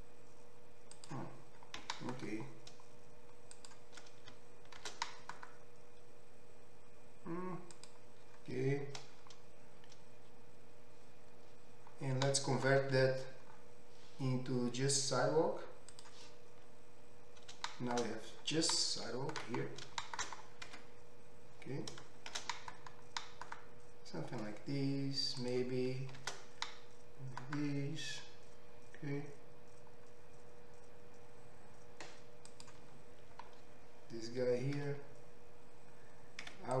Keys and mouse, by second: 1.8 g, 4.8 shift+d, 5.8-20.3 middle drag, 13.1 Tab, 16.0-18.3 drag, 16.0-18.3 right drag, 21.0 Tab, 22.6 shift+d, 25.5-32.5 drag, 26.5 shift+d, 32.5-36.8 right drag, 35.2 2.